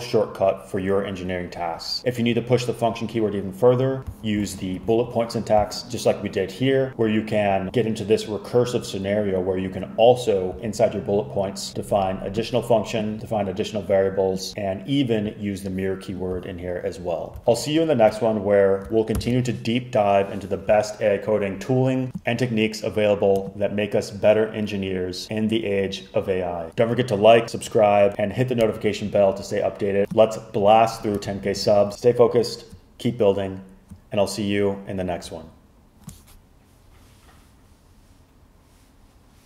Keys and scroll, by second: 4.5 super+z, 19.2 super+h.